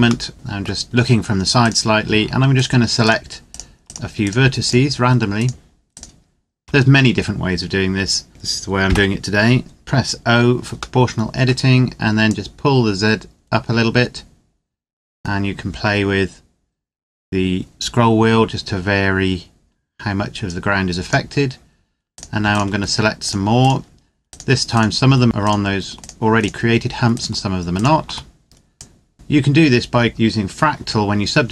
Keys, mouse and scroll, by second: 0.0 middle click, 0.6 scroll up 1, 0.8-1.4 scroll down 1, 1.4 right click, 2.4 shift+right click, 8.6 o, 10.8 middle click, 12.0 click, 13.3-14.0 scroll down 1, 14.0-14.5 scroll up 1, 14.5-14.9 scroll down 1, 14.9-15.5 scroll up 1, 15.5-17.9 scroll down 1, 17.9-21.1 scroll up 1, 21.9 right click, 22.2 shift+right click, 28.5 click, 30.1-31.5 scroll down 1.